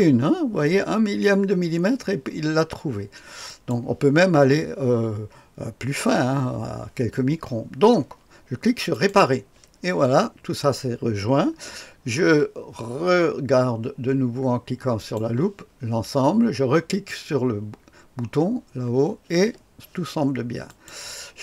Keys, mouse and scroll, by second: 3.5 click, 8.9 click, 15.0 click, 16.9 click, 20.7 click.